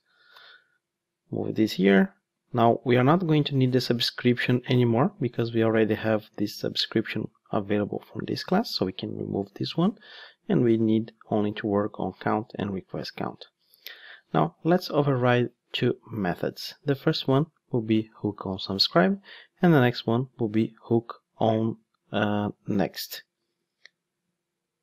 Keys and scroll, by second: 0.3 super+/, 3.4 super+/, 3.5 ctrl+Tab, 7.8 ctrl+Tab, 9.0 super+x, 14.0 ctrl+o.